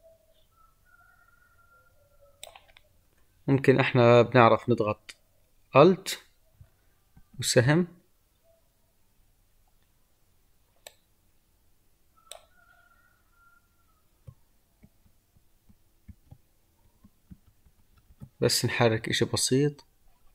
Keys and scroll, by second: 7.0 alt+Left, 14.7 ctrl+Left.